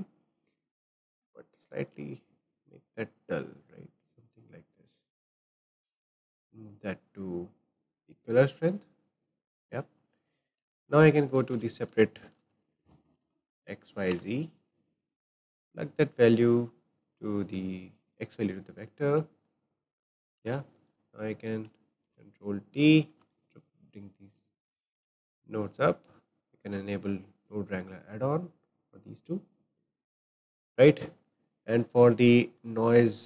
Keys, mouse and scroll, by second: 1.8 click, 3.1-4.2 drag, 5.4 click, 6.3-8.4 drag, 10.7-11.5 shift+middle drag, 11.5 shift+a, 14.2 shift+a, 16.3 click, 18.2 click, 19.5-20.6 shift+middle drag, 20.6 shift+a, 20.9 click, 21.5 click, 22.0 ctrl+t, 23.0 shift+middle click, 23.4 click, 24.4 Delete, 24.8 click, 25.9 click, 27.8 click, 28.7 click, 29.5-29.9 drag, 29.9-32.7 shift+middle drag, 32.7-33.1 drag, 32.7-33.0 shift+scroll down 1, 33.0-33.2 scroll up 3.